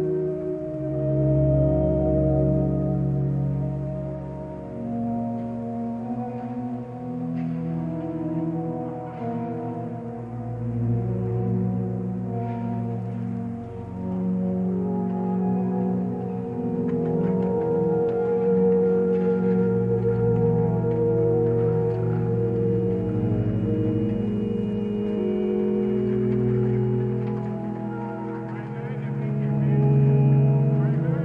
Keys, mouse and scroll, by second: 8.1 x, 11.1 x, 12.6 x, 14.4 x, 19.7 ctrl+z, 20.5 ctrl+space, 22.1 x, 23.3 ctrl+z, 23.7 x.